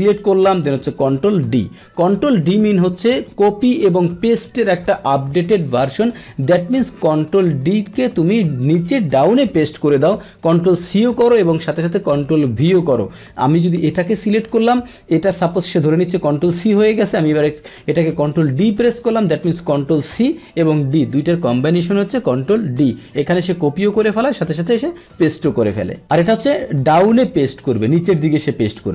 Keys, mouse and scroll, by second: 1.4 ctrl+d, 13.4 click, 14.4 Delete, 15.0-16.2 drag, 18.4 ctrl+d, 19.9 click.